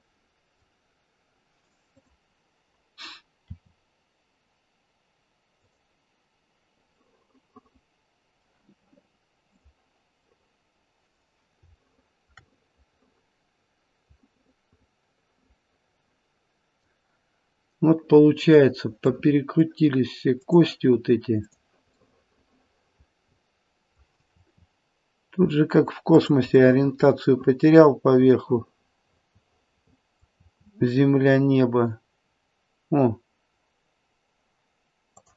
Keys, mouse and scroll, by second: 1.9 click, 3.4 r, 6.9 middle click, 9.5 click, 10.2 middle click, 10.2 scroll up 1, 10.3 middle click, 11.8 shift+middle click, 12.5 middle click, 14.1 middle click, 14.6 middle click, 15.6 middle click, 15.8 middle click, 16.3 middle click, 18.5 click, 19.1 middle click, 19.4 middle click, 20.3 click, 20.3 middle click, 21.4 click, 22.6 middle click, 23.0 middle click, 24.4 r, 26.6 middle click, 30.4 r.